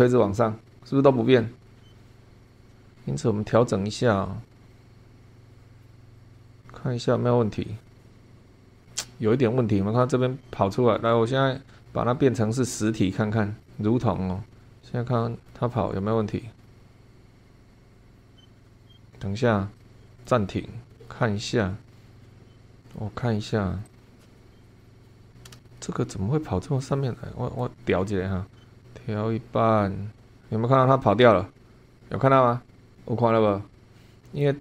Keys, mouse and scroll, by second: 12.5 click, 13.6 click, 14.6-15.7 middle drag, 19.8 click, 20.2 click, 21.0-22.1 middle drag, 22.1 scroll down 1, 22.3 middle click, 23.8 click, 24.0 scroll up 1, 24.2 shift+click, 24.6 click, 25.2 scroll up 1, 25.6 shift+click, 26.1 middle click, 28.4-34.6 drag.